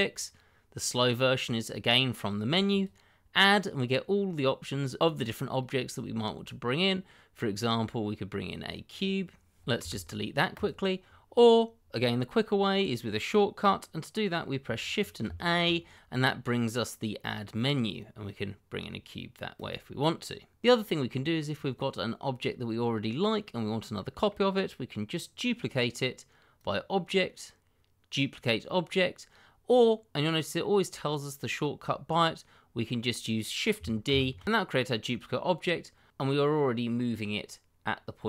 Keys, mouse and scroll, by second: 2.7 click, 8.8 click, 9.8 x, 10.5 click, 15.2 shift+a, 19.5 click, 20.6 middle click, 22.5-23.4 scroll down 1, 23.4 middle click, 26.5 click, 34.0 shift+d.